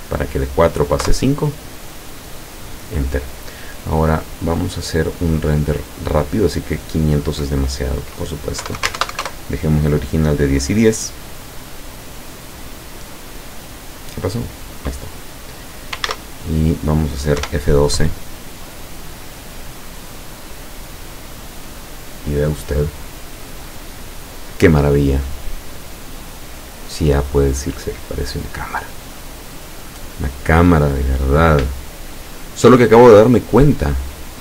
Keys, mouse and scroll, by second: 1.1 KP_Enter, 4.2 click, 5.3-6.2 scroll down 4, 6.6 click, 8.7 KP_1, 8.8 KP_0, 9.0 Tab, 9.1 KP_1, 9.3 KP_Enter, 16.1 ctrl+s, 16.3 ctrl+click, 17.5 F12.